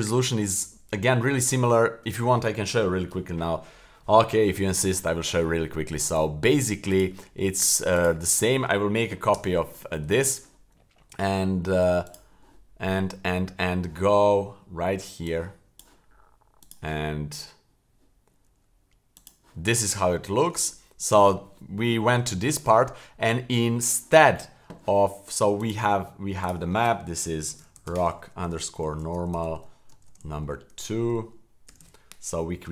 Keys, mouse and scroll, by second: 6.9 click, 8.0 click, 9.3 shift+d, 12.1 click, 15.2-15.8 drag, 16.7 click, 19.2 click, 19.9 scroll up 1, 20.2-20.5 shift+middle drag, 20.6-21.0 middle drag, 21.3 middle drag, 22.4 shift+middle click, 25.6-32.7 drag, 31.0 BackSpace.